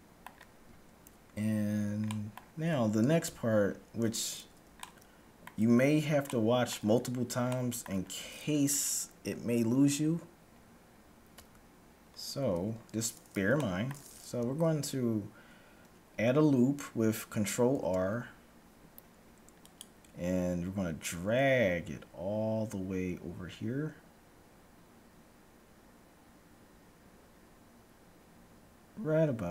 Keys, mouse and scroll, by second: 2.0-4.0 middle drag, 3.2 KP_1, 4.9-9.2 middle drag, 9.2-10.0 scroll up 1, 10.4-11.4 scroll up 1, 11.4 Tab, 11.4-12.4 middle drag, 12.5 a, 13.5-15.9 middle drag, 17.5 ctrl+r.